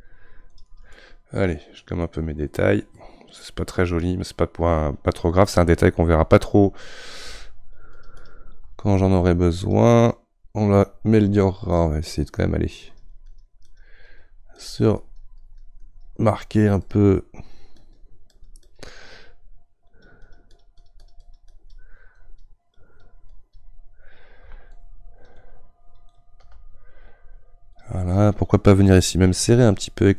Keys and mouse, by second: 0.9-7.9 middle drag, 7.9-25.3 shift+drag, 26.1 click, 27.8-30.1 drag.